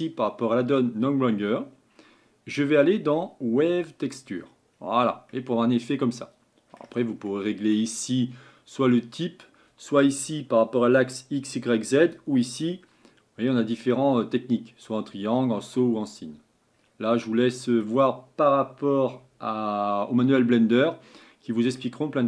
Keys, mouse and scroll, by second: 21.0-22.2 middle drag.